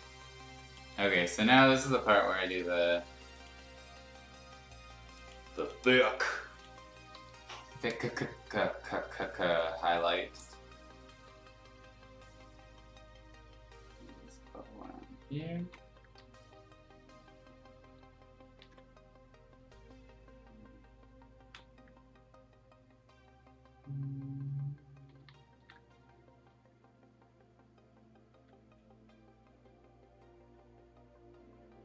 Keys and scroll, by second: 0.9 b, 7.1 b, 9.1 [, 15.5 ctrl+z, 18.6 ctrl+z, 25.1 ctrl+z, 25.2 ctrl+z, 25.5 ctrl+z.